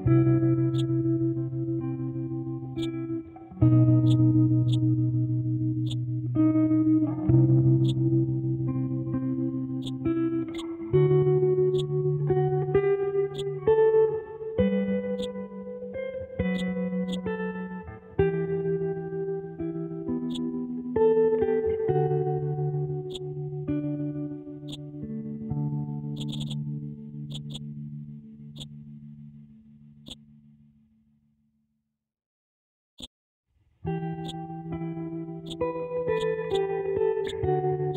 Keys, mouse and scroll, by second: 0.7-2.3 drag, 2.7 click, 4.0 click, 5.8-14.7 shift+drag, 15.1-18.9 drag, 18.9-19.3 scroll up 1, 19.3 scroll down 1, 20.3 click, 21.1-21.7 scroll down 1, 21.7 scroll up 1, 22.2-23.1 scroll down 1, 23.1-24.7 drag, 24.7 click, 25.5-26.1 scroll down 1, 26.1 click, 30.0 click, 32.1 scroll down 1, 32.9 click, 34.2-37.9 drag.